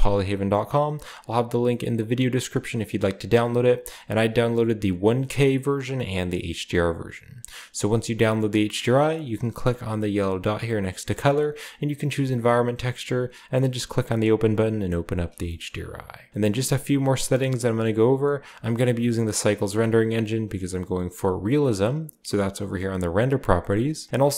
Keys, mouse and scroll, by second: 3.7 click, 4.2-6.3 drag, 7.5 click, 10.6-13.0 drag, 15.4-17.7 shift+middle drag, 17.7-18.9 drag, 23.1 click.